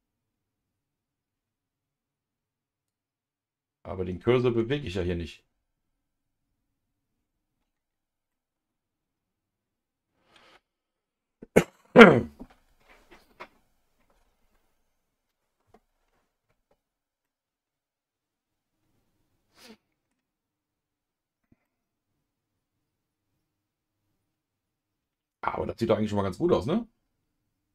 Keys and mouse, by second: 2.8-4.2 drag, 8.3-11.2 middle drag, 17.2-20.1 middle drag, 21.6-27.7 middle drag.